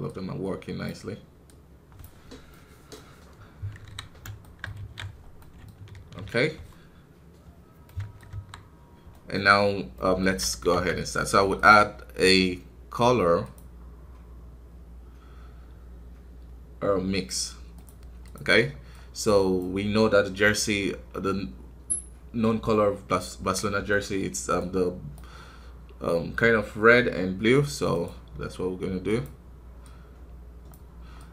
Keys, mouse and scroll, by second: 2.4 middle click, 3.3-3.8 scroll up 2, 3.8 KP_1, 4.0-4.3 scroll down 1, 4.3 shift+middle click, 4.7 alt+a, 5.3-8.2 middle drag, 8.2 KP_1, 19.5-29.7 drag.